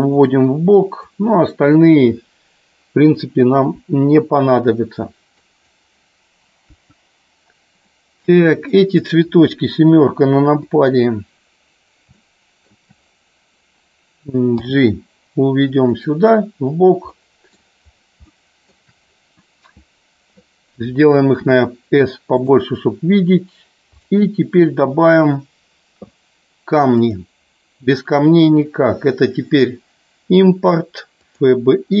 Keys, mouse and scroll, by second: 1.0 click, 3.7 Delete, 5.4-5.7 drag, 6.7 Delete, 7.8 middle click, 8.6 click, 10.5 KP_7, 12.1 shift+middle click, 15.9 click, 17.0 middle click, 18.2 shift+middle click, 22.3 click, 23.9 click, 27.0-31.6 drag.